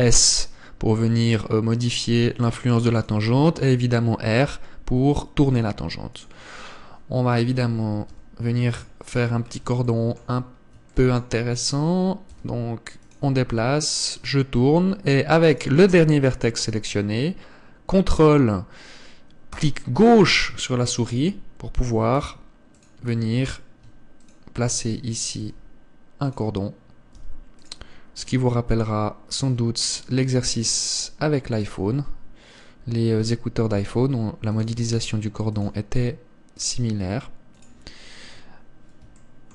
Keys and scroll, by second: 0.5 s, 4.2 r, 8.7 g, 12.9 s, 14.1 r, 22.9 s, 26.1 r, 27.9 g, 34.5 g, 35.7 r, 36.6 s.